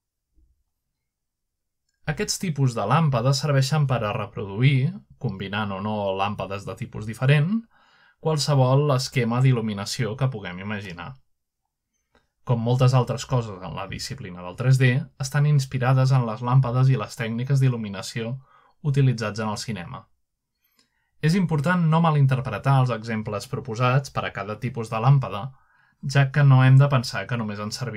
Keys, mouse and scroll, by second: 0.1 click, 1.8 s, 2.7 right click, 3.1 middle click, 3.1 typing, 3.8 click, 7.8 middle click, 9.1 middle click, 10.0 shift+d, 11.1 click, 12.2 click, 13.3 middle click, 14.9-17.0 drag, 17.4 typing, 18.6 click, 18.9-19.3 middle drag, 19.3 click, 19.7 middle drag, 20.4-21.1 middle drag, 20.8 g, 21.4-22.5 drag, 22.7-23.5 scroll down 1, 23.1-23.5 middle drag, 23.3 typing, 23.9 middle click, 24.4-25.5 scroll up 1, 25.3-26.3 middle drag, 26.8 click.